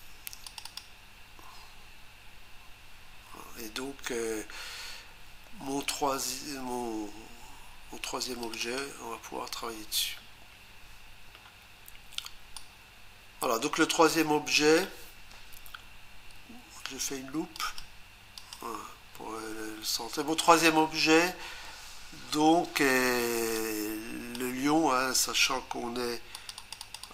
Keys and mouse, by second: 0.5 click, 0.6 click, 0.8 double click, 8.4 click, 8.6 click, 8.8 double click, 12.5 click, 17.5 ctrl+click, 18.4 ctrl+click, 23.5 click, 26.3 ctrl+click, 26.7 ctrl+double click, 26.8 ctrl+click.